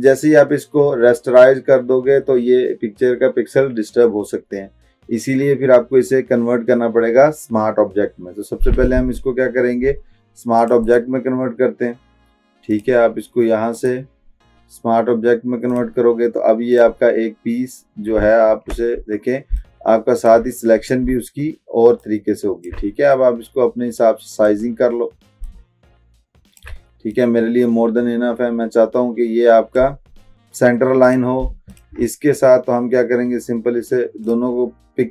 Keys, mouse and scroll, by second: 10.9 right click, 12.8 click, 13.8 right click, 18.2 click, 18.5 ctrl+t, 19.6-20.6 shift+drag, 22.1-23.0 shift+drag, 31.8 shift+click, 34.9 click.